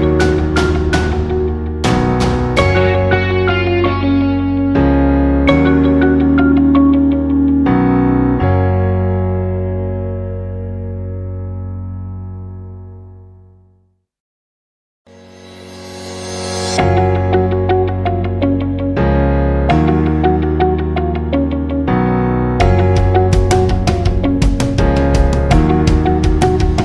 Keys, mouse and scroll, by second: 0.1 space, 0.2 click, 0.7 alt+scroll down 1, 0.9 space, 1.1-2.5 drag, 2.8 right click, 4.0 click, 8.7 click, 9.7 alt+scroll up 1, 9.9 space, 10.2 click, 10.5 space, 11.2 alt+scroll down 1, 11.4 space, 11.5 click, 15.7 alt+scroll up 1, 15.9 space, 16.1 click, 16.7 alt+scroll down 1, 16.9 space, 17.0 click, 17.5 space, 19.6 click, 22.0 a, 23.2 typing, 24.6 click.